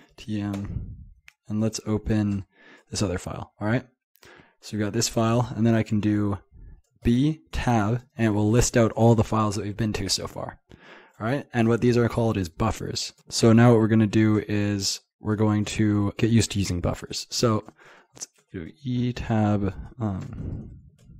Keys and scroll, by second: 17.7-18.7 typing, 18.7 Tab, 19.2 Tab, 19.4 Tab, 20.1 Escape, 20.3-21.1 typing.